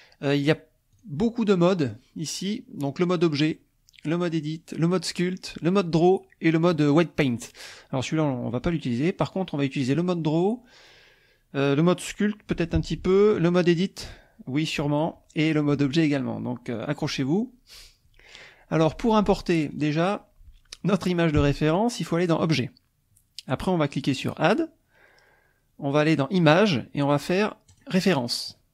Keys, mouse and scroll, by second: 1.0 click, 16.8 click, 19.7 click, 22.5 click, 24.2-25.5 drag, 27.7 click.